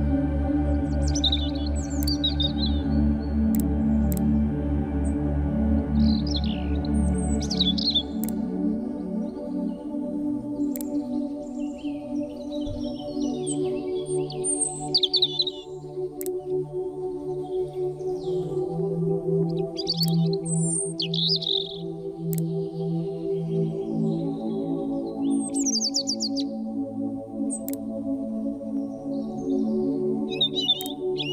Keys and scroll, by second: 1.9 v, 5.1 Delete, 9.0 Delete, 12.0 Delete.